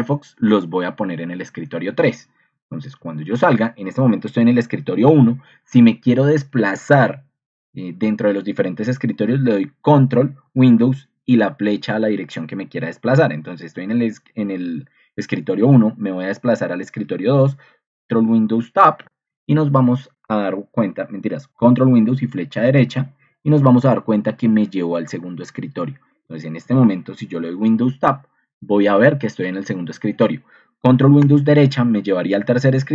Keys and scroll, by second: 3.4 Escape, 14.6 Escape, 18.8 ctrl+super+Right, 18.8 ctrl+2, 27.3 super+Tab, 29.9 Escape, 31.3 ctrl+Escape.